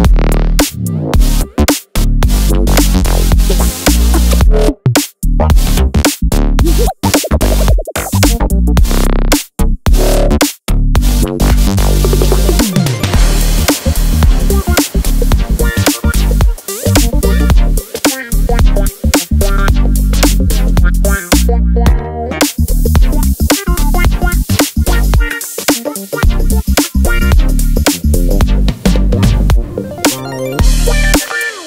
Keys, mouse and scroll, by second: 0.8 click, 2.1 click, 2.9 click, 3.9 click, 4.9 click, 7.4 click, 11.5 click, 13.8 click, 16.6 click, 17.4 click, 18.4 click, 19.1 click, 20.4 click, 21.6 click, 21.9 click, 23.1 click, 27.6 click, 28.4 click, 30.8 click.